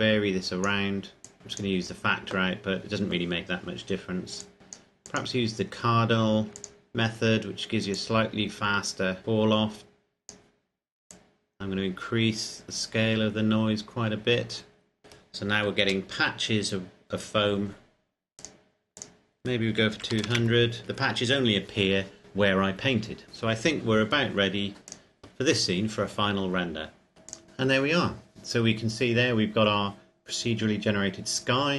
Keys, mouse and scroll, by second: 4.6 click, 8.4 click, 11.9 click, 16.2 KP_0, 18.6 click, 20.2 KP_2, 20.4 KP_0, 20.8 KP_Enter, 25.2 click, 27.1 click.